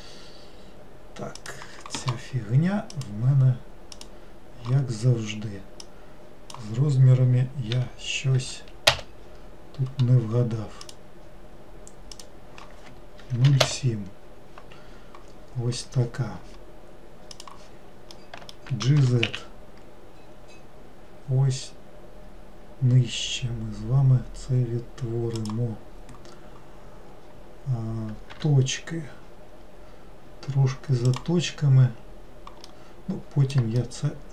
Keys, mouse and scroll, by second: 3.1-7.3 drag, 11.0-14.2 drag, 17.5 click, 18.3 middle click, 19.2 g, 31.2 click, 32.8-34.3 middle drag.